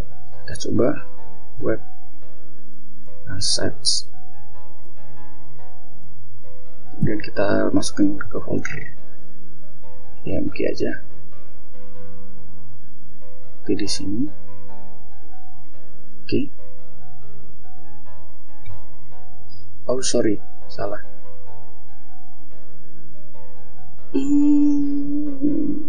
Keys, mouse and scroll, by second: 0.0-4.8 typing, 6.2-8.1 typing, 11.7 click, 13.3 click, 15.1 Right, 17.8 click, 19.7 click, 20.9 click, 22.3 click.